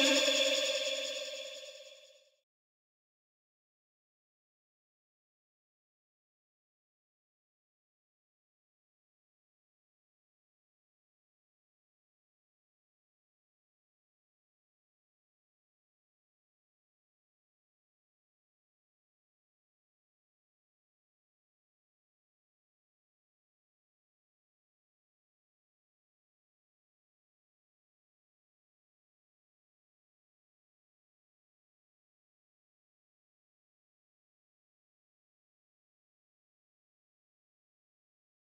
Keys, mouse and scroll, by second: 0.8-1.2 drag, 12.2 ctrl+t, 13.5-14.3 drag, 19.6-20.5 drag, 26.4 ctrl+t, 27.5-28.3 drag, 36.4 Left.